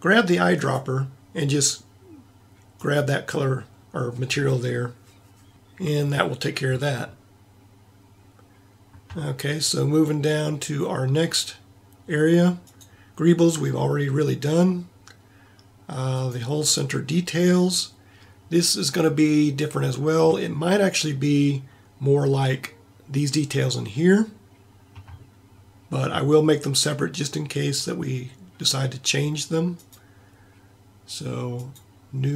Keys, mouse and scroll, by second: 9.3-12.6 middle drag, 12.9 right click.